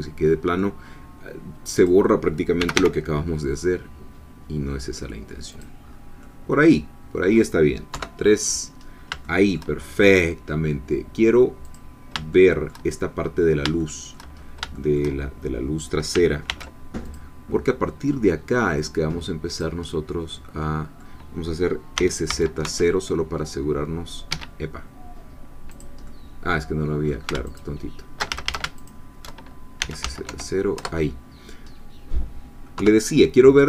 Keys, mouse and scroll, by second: 0.7-1.8 scroll up 1, 1.8 click, 2.6 g, 2.7 y, 5.5 click, 5.9-6.2 scroll down 1, 6.2-7.9 middle drag, 7.9 3, 8.8 scroll down 1, 9.2 shift+middle click, 9.9-10.5 shift+scroll up 1, 11.7 click, 12.3 shift+middle click, 13.8 shift+middle click, 14.4-14.7 shift+scroll up 2, 14.7 shift+middle click, 16.5 ctrl+r, 17.1 ctrl+click, 19.5 click, 19.9-21.9 middle drag, 21.9 s, 22.3 z, 22.6 0, 24.3 Escape, 25.8 click, 26.1-27.3 middle drag, 27.5 alt+shift+click, 28.3 alt+shift+a, 28.9 alt+shift+click, 29.8 s, 30.0 z, 30.3 0, 30.7 Return, 32.7 3.